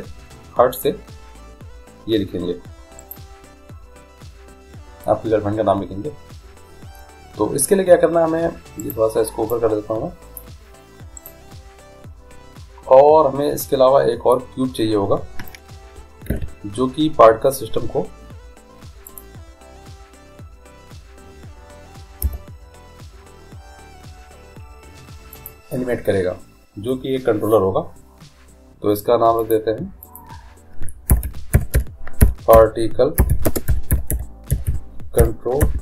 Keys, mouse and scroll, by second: 3.2-6.7 right drag, 9.0-10.8 right drag, 9.7-10.9 drag, 11.5 click, 11.5-13.1 right drag, 16.5 shift+a, 22.4 g, 29.6-32.1 drag.